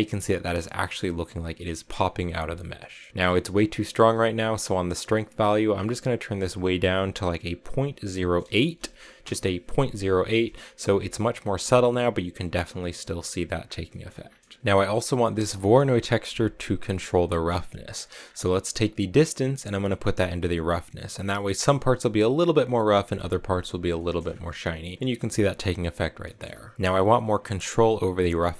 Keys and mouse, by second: 2.0 middle click, 2.8 middle click, 5.9-9.7 drag, 10.4 shift+click, 13.8 middle click, 15.3 click, 19.4-21.2 drag, 23.9 shift+click, 26.2 middle click.